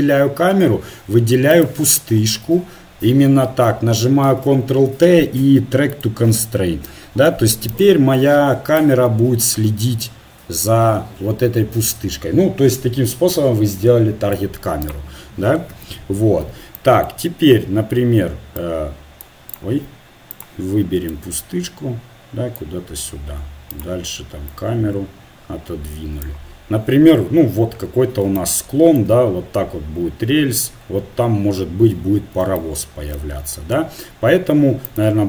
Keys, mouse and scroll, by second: 4.2 ctrl+t, 8.7-11.1 right drag, 15.7 KP_7, 18.6-20.1 right drag, 20.5-23.2 right drag, 21.1-22.5 drag, 22.8 click, 23.2 middle click, 23.7-25.7 right drag, 24.5-28.4 drag, 28.4-34.9 middle drag, 34.9-35.2 right drag.